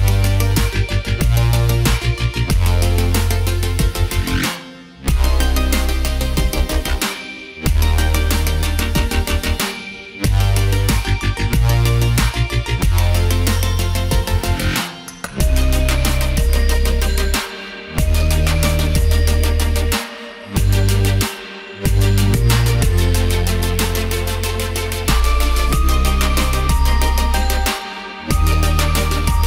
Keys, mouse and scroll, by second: 0.1 alt+click, 1.1 alt+click, 2.3 click, 2.8 alt+scroll down 2, 5.0 click, 5.4 click, 6.4 click, 7.5 click, 8.7 click, 10.2 click, 12.1 click, 14.9 click, 16.1 click, 17.7 ctrl+z, 18.2 click, 19.0 alt+click, 20.5 click, 21.9 click, 22.7 click, 23.5 click, 24.2 click, 25.7 click, 28.1 z, 28.7 click.